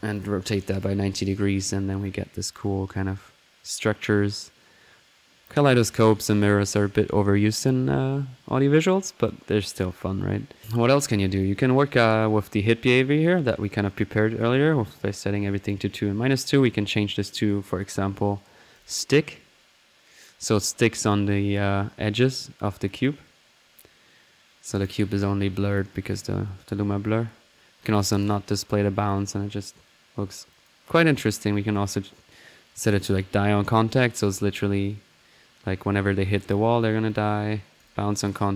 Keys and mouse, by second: 0.0 click, 0.6 drag, 4.1-5.9 middle drag, 8.7 middle click, 9.9 click, 10.5 middle click, 11.2 click, 12.0 click, 13.8 click, 16.3 click, 18.7 click, 21.5 click, 21.8 drag, 22.7-24.4 drag, 24.6 click, 25.1 middle click, 25.7 click, 28.1 click, 30.5 click, 31.0 click, 32.8 click, 37.0-37.7 drag, 37.8 click.